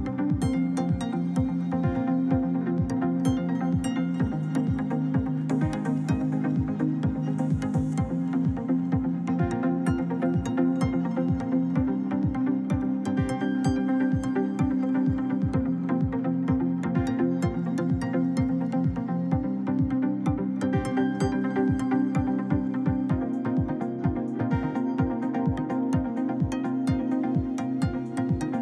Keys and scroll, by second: 22.3 1, 22.8 Return, 24.8 1, 25.5 Return.